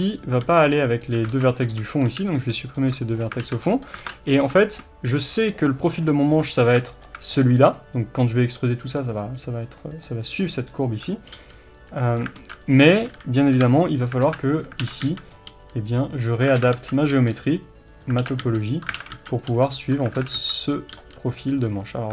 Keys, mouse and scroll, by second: 0.8 b, 1.0 scroll up 1, 1.3 alt+z, 1.9 b, 2.8-7.0 shift+middle drag, 2.8 x, 3.4 alt+z, 3.7-4.0 scroll up 2, 4.0 alt+z, 5.3-7.0 scroll up 1, 7.0 alt+click, 7.3-11.1 middle drag, 10.6-11.1 scroll up 2, 11.1 click, 11.3 g, 12.4 alt+z, 13.0 KP_1, 14.2 alt+z, 14.6 scroll up 1, 14.8 alt+a, 16.2 click, 16.6 alt+a, 17.0 b, 18.2 alt+a, 19.0 alt+a, 19.4 b, 20.2 alt+a, 20.7 b.